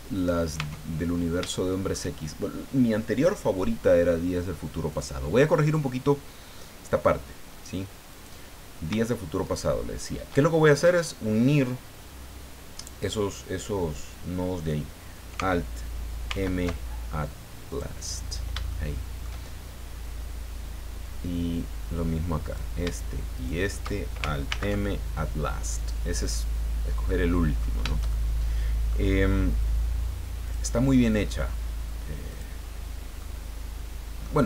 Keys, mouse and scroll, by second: 0.2 right click, 0.4 middle click, 0.6 Tab, 1.5 shift+middle click, 4.9 click, 8.1 right click, 9.4 shift+right click, 16.3 alt+m, 17.7 click, 18.7 shift+middle click, 22.4 right click, 23.3 shift+right click, 24.5 alt+m, 25.7 click, 26.7 scroll down 1, 27.0 middle click, 28.1 shift+middle click, 30.4 click, 32.3 click, 33.2-34.4 middle drag.